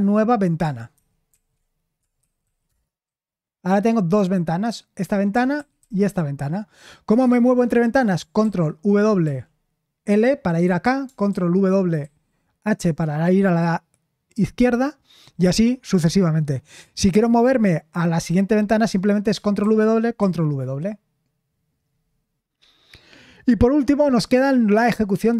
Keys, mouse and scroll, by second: 0.9 ctrl+w, 1.3 ctrl+w, 1.9-2.9 typing, 5.5 ctrl+w, 5.8 ctrl+w, 8.4 ctrl+w, 9.2 l, 11.3 ctrl+w, 12.0 h, 19.6 ctrl+w, 20.2 ctrl+w.